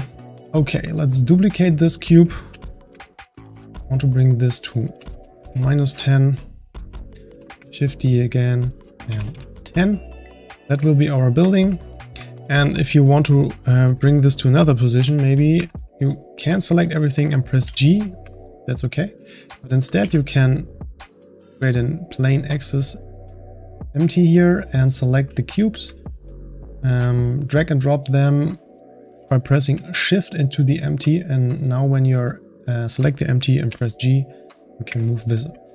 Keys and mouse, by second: 0.4-1.5 ctrl+middle drag, 1.5-2.0 drag, 2.5 shift+d, 4.3-6.1 drag, 6.1-7.3 middle drag, 7.3 shift+d, 8.4-10.1 drag, 10.1-10.5 middle drag, 10.5-10.9 drag, 10.9-14.7 middle drag, 14.7-15.0 drag, 15.0 g, 16.1-17.6 shift+drag, 17.6 g, 19.0-20.0 drag, 20.0 shift+a, 23.9-24.3 drag, 25.0-25.4 drag, 25.6 shift+click, 27.5 click, 31.1-31.4 drag, 31.7-32.1 drag, 33.6 g.